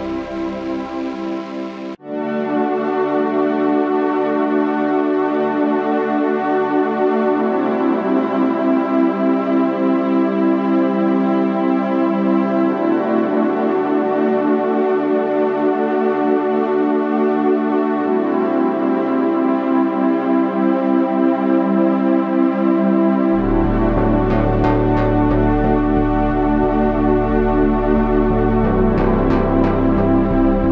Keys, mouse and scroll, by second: 3.4 g, 6.3 g, 11.0 g, 12.9 g, 17.1 ctrl+r, 19.4 g, 22.2 Tab, 22.9 z, 26.1 KP_3, 26.3 Tab, 26.8 z, 28.2-29.2 ctrl+z.